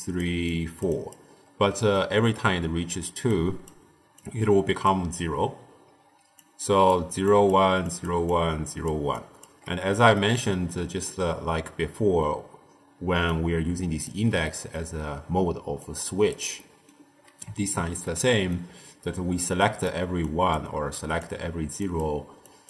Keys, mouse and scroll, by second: 0.0-1.3 typing, 0.4 click, 0.9 click, 1.6 middle click, 2.5-3.1 d, 3.2-3.6 drag, 3.6-3.9 d, 4.1 click, 4.8 d, 4.9 d, 6.0-9.4 typing, 6.3-6.8 drag, 7.2 click, 7.8 click, 8.2 click, 9.1 click, 9.8 scroll up 1, 9.8 middle click, 10.3-11.0 scroll down 6, 11.0-13.0 middle drag, 13.0 d, 13.2 click, 14.0 d, 14.1 d, 14.3-15.5 middle drag, 15.5 d, 15.7 right click, 16.2 d, 16.5-18.8 middle drag, 18.8-22.6 typing, 19.5 click, 20.1 click, 20.9 click, 21.8 click, 22.4 click.